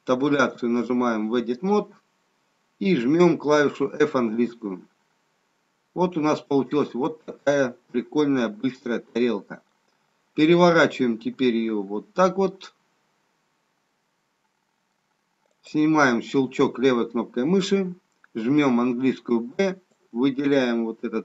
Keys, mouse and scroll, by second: 0.3 Tab, 4.4 f, 5.5-6.5 scroll up 2, 6.5 scroll down 1, 6.8 middle click, 15.6 click, 19.0 b.